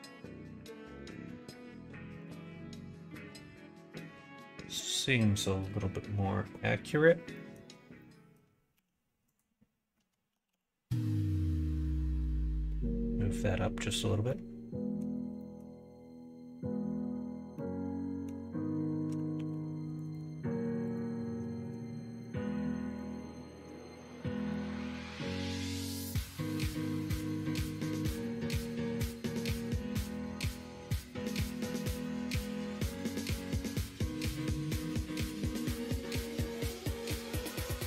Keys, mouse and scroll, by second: 1.4 alt+z, 2.7 middle click, 7.3 middle click, 8.0 middle click, 8.7 a, 10.3 g, 14.2 middle click, 15.3 middle click, 17.5 scroll up 1, 17.6 middle click, 18.2-19.1 scroll down 1, 19.3 ctrl+r, 20.9 click, 22.2 middle click, 22.9 shift+click, 23.2 middle click, 23.9 middle click, 24.7 middle click, 25.3 middle click, 25.9 middle click, 26.6 middle click, 27.3 2, 28.4 click, 29.7 middle click, 30.5 middle click, 31.6 alt+shift+click, 32.7 alt+shift+click, 34.3 alt+shift+click, 34.6 x, 36.3 middle click.